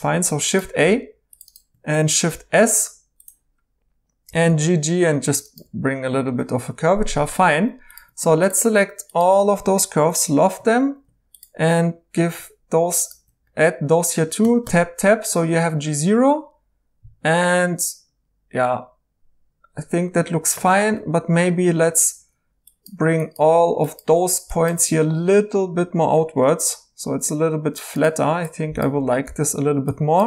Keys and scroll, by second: 0.0-0.1 typing, 2.6 s, 4.2-5.6 typing, 10.0 i, 14.4 Tab, 14.6 Tab, 20.4 Escape, 22.1 1, 26.5 g, 29.3 g.